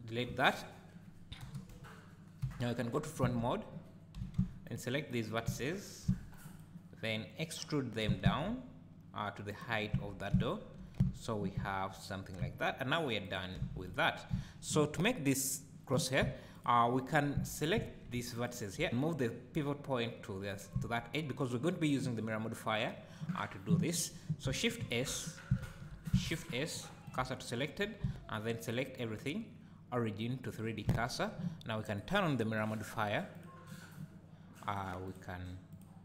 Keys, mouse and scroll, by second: 1.4-4.3 typing, 6.8-7.2 scroll down 1, 7.2-8.0 scroll up 1, 8.0 e, 9.6 click, 9.9 Tab, 10.3 `, 11.0 z, 11.5 `, 12.1 scroll up 2, 12.4 `, 13.2 click, 13.7 x, 14.3 `, 16.5 click, 17.7 `, 18.3 alt+click, 20.7 `, 24.8 shift+s, 25.6 shift+s, 26.3 shift+s, 28.0 Tab, 28.4-31.9 right drag, 31.9 click, 32.2-34.8 drag, 35.1 click, 35.7 click.